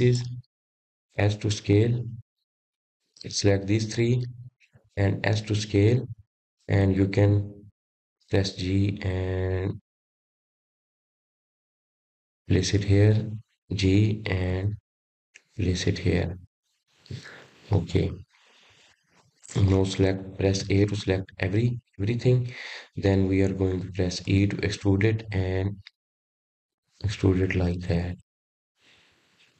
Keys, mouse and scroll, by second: 1.6 click, 2.3 click, 3.5 click, 4.0 click, 5.3 s, 7.8 click, 9.1 s, 10.7 click, 12.4 g, 17.4 click, 18.7 g, 21.1 click, 21.7-22.6 scroll down 2, 22.6 middle click, 23.5-23.8 scroll down 1, 24.1 middle click, 24.9 a, 28.6 e.